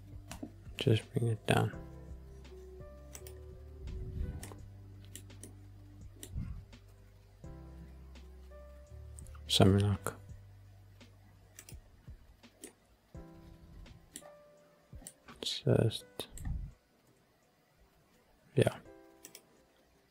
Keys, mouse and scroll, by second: 3.0 click, 4.4-5.1 middle drag, 5.3-6.2 middle drag, 11.5 click, 12.0-12.5 scroll down 3, 12.5-14.1 middle drag, 15.0-16.4 middle drag, 17.0 r, 19.2 click.